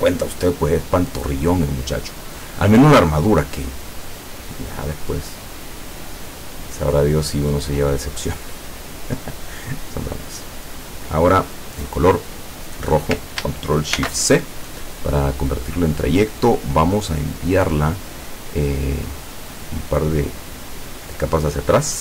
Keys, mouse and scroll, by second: 5.6-10.8 drag, 12.0 click, 12.7 click, 14.0 ctrl+shift+c, 16.5 click, 19.3 click, 19.8 click, 20.2 click.